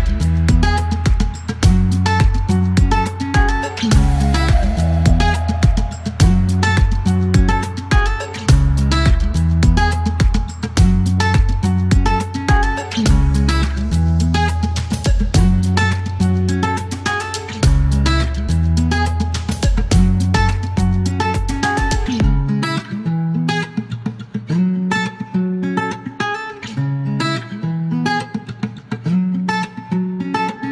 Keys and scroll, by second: 0.8 typing, 3.3 space, 4.5 space, 6.0-7.1 typing, 8.3 space, 9.7 space, 10.4 space, 11.8 space, 13.4 space, 13.8 e, 16.1-17.4 typing, 16.8 alt+k, 18.7 space, 19.4 m, 21.5 alt+k, 21.6 alt+l, 23.7 KP_4, 23.8 Return, 26.4-29.7 typing.